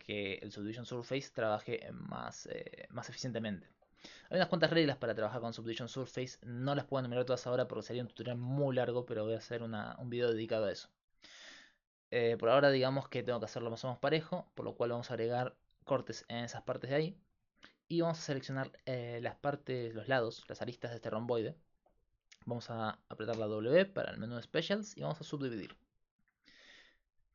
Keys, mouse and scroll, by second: 1.4-3.5 middle drag, 8.2 ctrl+Tab, 12.6 right click, 20.3-21.6 right drag, 23.4 w.